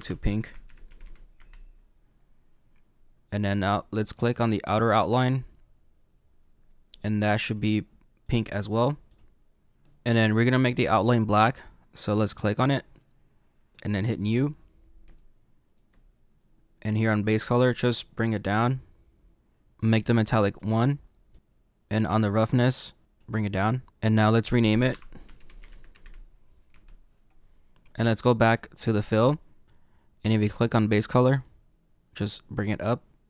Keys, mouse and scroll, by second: 1.3 click, 4.3 click, 7.5 click, 9.0 click, 9.7 click, 12.3 click, 14.2 click, 18.5 click, 21.3 click, 21.4 click, 23.0 click, 23.9 scroll down 4, 26.7 click, 28.5 click, 32.8 click.